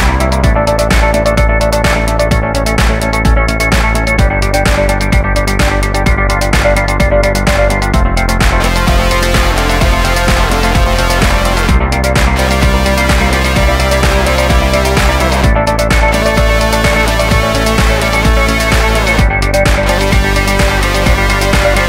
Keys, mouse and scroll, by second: 0.2 click, 0.6 middle click, 1.5 middle click, 2.6 Tab, 3.0 1, 3.3 Tab, 3.3 scroll up 1, 3.6 alt+right click, 3.8 middle click, 4.0 middle click, 4.1 1, 5.0 e, 5.0 z, 5.6 click, 6.2 click, 6.6 click, 7.0 click, 7.4 alt+right click, 8.2 e, 8.3 x, 8.8 click, 9.1 click, 9.3 click, 9.6 scroll down 1, 10.2 scroll up 1, 10.8 right click, 11.3 ctrl+click, 11.6 click, 11.8 scroll up 1, 11.9 scroll down 1, 12.2 scroll up 1, 12.7 middle click, 12.9 middle click, 13.3 right click, 13.5 alt+right click, 13.9 click, 14.6 middle click, 15.0 middle click, 15.2 middle click, 15.4 middle click, 15.4 right click, 15.6 1, 15.9 e, 16.2 click, 16.5 middle click, 16.6 middle click, 16.8 right click, 17.2 shift+right click, 17.3 f, 17.7 middle click, 18.0 e, 18.1 z, 18.8 click, 19.2 shift+right click, 19.5 f, 21.2 right click, 21.6 ctrl+r.